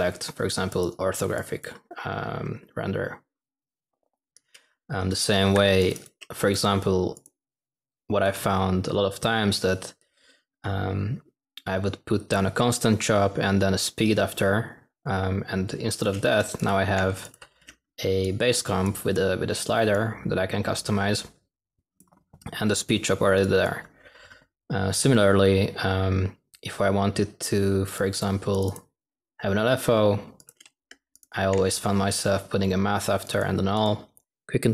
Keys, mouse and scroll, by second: 8.2 s.